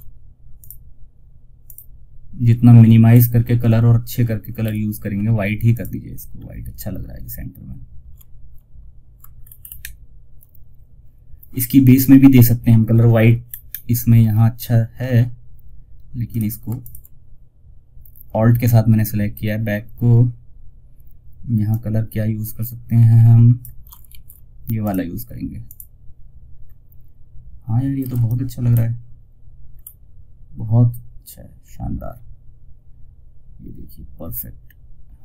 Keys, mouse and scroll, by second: 2.4-2.8 scroll up 1, 2.9 scroll down 1, 3.9 ctrl+z, 5.0 click, 5.6 scroll down 1, 8.7-9.0 alt+scroll up 1, 9.8-10.3 alt+scroll up 1, 12.8 scroll up 1, 14.6-15.5 scroll down 1, 15.6 click, 19.4 scroll down 1, 21.0-23.4 drag, 23.4 ctrl+alt+s, 24.1 click, 25.9-26.5 scroll down 1, 27.3 F2, 27.5 click, 29.0 scroll up 1, 31.2-31.7 scroll down 1.